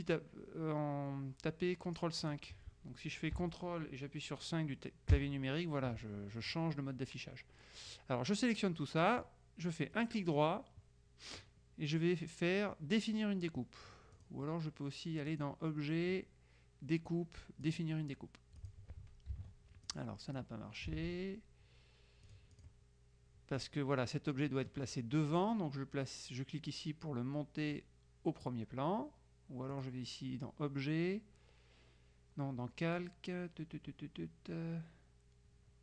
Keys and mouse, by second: 2.4 click, 5.2 ctrl+KP_5, 8.0-9.6 drag, 10.0 right click, 14.2 click, 15.4 click, 17.7 click, 18.7 click, 19.4 ctrl+z, 20.0 ctrl+click, 21.0 ctrl+z, 22.4 click, 23.6 click, 29.8 click.